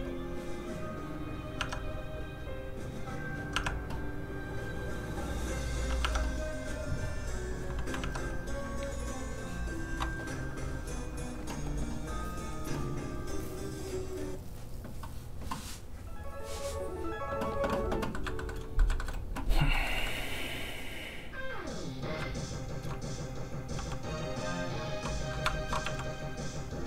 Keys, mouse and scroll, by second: 1.3 alt+click, 1.6 alt+Tab, 3.2 alt+click, 3.6 alt+Tab, 5.5 alt+click, 6.1 alt+Tab, 6.1 alt+click, 7.4 alt+Tab, 7.4 alt+click, 8.0 alt+Tab, 8.0 alt+click, 9.9 alt+Tab, 10.7 click, 11.2-14.1 scroll down 1, 14.1 click, 18.2 middle click, 19.5 shift+middle click, 19.5 shift+scroll up 1, 19.8 shift+middle click, 20.0 middle click, 20.1-21.6 scroll up 1, 21.6 click, 22.3 shift+click, 23.0 click, 23.1 click, 23.8 f, 23.9 click, 25.6 shift+click, 25.9 shift+f, 26.0 click.